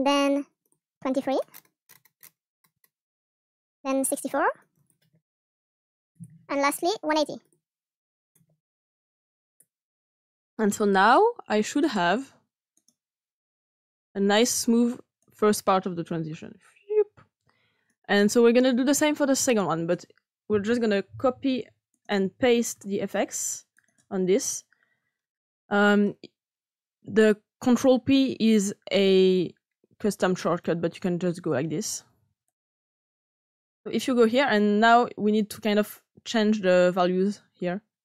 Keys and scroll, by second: 5.9 typing, 6.1 Return, 8.3-9.1 typing, 9.5 Return, 21.3 ctrl+c, 22.7 ctrl+p.